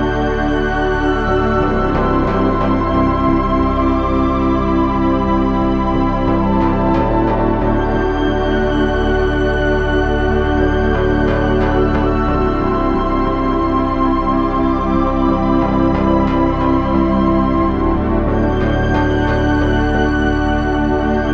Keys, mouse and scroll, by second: 0.9 KP_3, 1.1 z, 1.8 z, 2.4 ctrl+Tab, 3.8 g, 5.4 ctrl+Tab, 13.4 KP_3, 14.0 ctrl+Tab, 14.6 z, 16.6 g.